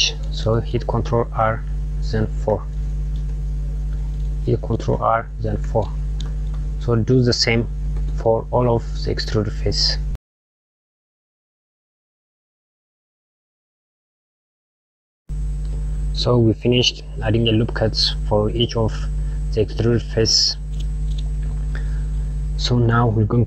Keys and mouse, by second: 1.4 ctrl+r, 4.9 ctrl+r, 10.3 ctrl+r, 10.7 ctrl+r, 11.2 click, 11.5 ctrl+r, 12.6 click, 12.8 ctrl+r, 13.1 ctrl+z, 13.3 ctrl+r, 13.7 ctrl+r, 14.5 click, 14.7 ctrl+r, 17.8 click.